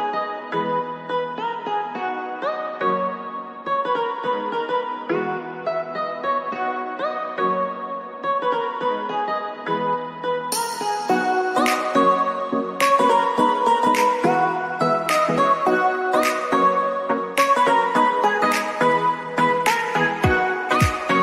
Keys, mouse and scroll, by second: 0.3 click, 0.3 click, 2.3 click, 4.2 click, 7.7-10.7 drag, 11.9 click, 15.1 click, 16.7 ctrl+shift+[, 17.2 click.